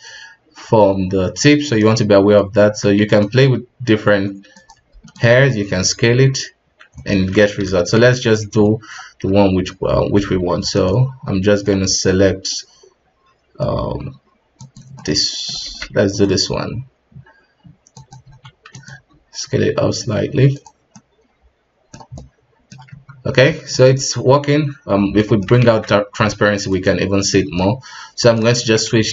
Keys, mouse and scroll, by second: 2.6 g, 3.4 r, 4.7 g, 5.4 s, 7.6 ctrl+z, 8.1 ctrl+z, 10.2 g, 16.3 r, 18.2 s, 18.9 g, 20.9-22.9 middle drag, 22.9 Tab, 23.2 scroll down 3, 23.5-24.7 middle drag, 24.7 ctrl+s, 24.8-25.2 scroll up 2, 25.2 middle click, 25.6 alt+a, 25.9-26.9 scroll down 1, 26.9 z, 27.3-29.1 middle drag.